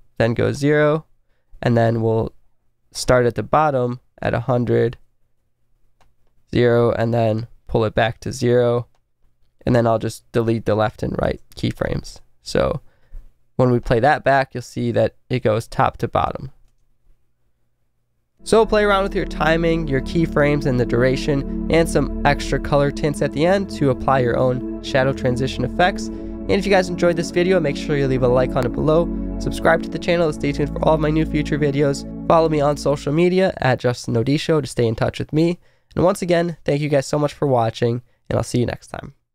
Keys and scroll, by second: 5.2 Left, 11.2 Return, 16.7 space.